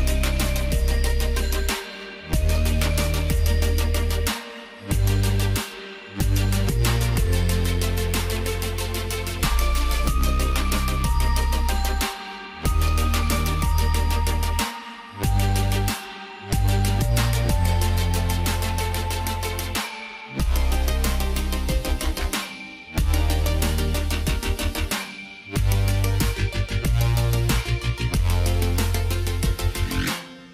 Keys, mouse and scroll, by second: 1.9 click, 28.9 click.